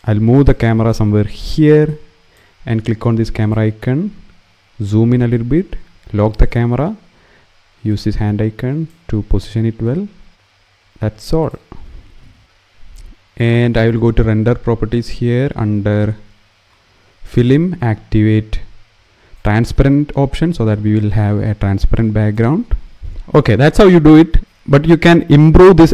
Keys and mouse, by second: 0.6 click, 1.5 click, 3.1 click, 7.6 click, 10.1 middle click, 11.1 click, 16.9 click, 19.1 click, 20.9 click, 21.5 middle click, 23.5 click.